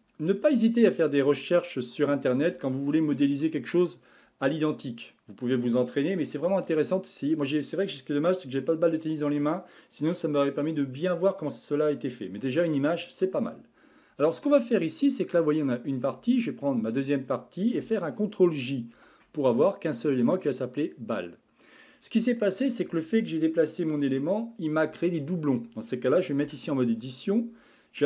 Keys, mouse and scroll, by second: 14.9-16.8 middle drag, 16.8 shift+click, 19.0 ctrl+j, 21.1-24.3 middle drag, 26.4 Tab.